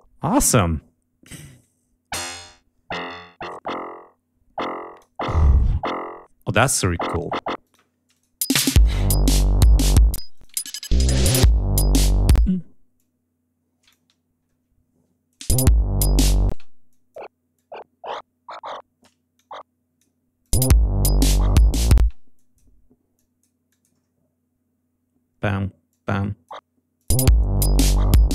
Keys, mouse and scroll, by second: 1.5-5.1 drag, 7.5 click, 8.3 space, 8.7 ctrl+scroll down 2, 10.0 space, 10.2 click, 11.0 d, 12.2 space, 12.9 click, 14.2 ctrl+scroll up 2, 15.2 click, 15.3 space, 16.4 space, 16.8 click, 17.4-19.1 drag, 19.2 click, 20.3 click, 20.5 space, 21.9 space, 22.2 click, 23.0 click, 23.6 click, 25.8 click, 26.9 click, 27.0 space.